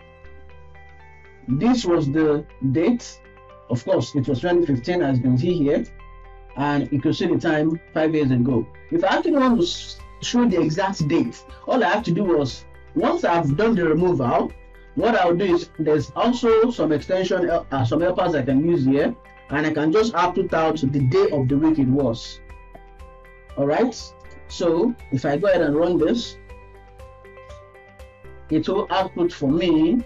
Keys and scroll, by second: 22.9 ctrl+s.